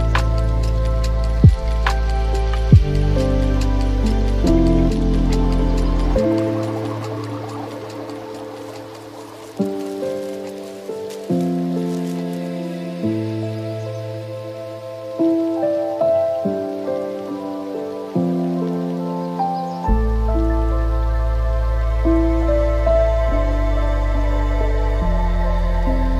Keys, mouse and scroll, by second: 0.4-1.9 middle drag, 1.9-2.6 drag, 2.6-3.6 middle drag, 3.6 shift+click, 4.5 x, 6.6 click, 7.5 x, 8.9 scroll down 2, 9.2-11.1 middle drag, 11.1 click, 11.5 scroll up 3, 12.2-13.9 middle drag, 13.9 click, 14.8-17.0 middle drag, 17.0 shift+click, 17.2 shift+click, 18.0 middle click, 18.8 scroll down 2, 19.5 s, 22.3 Tab, 23.2-24.4 middle drag, 24.4 right click.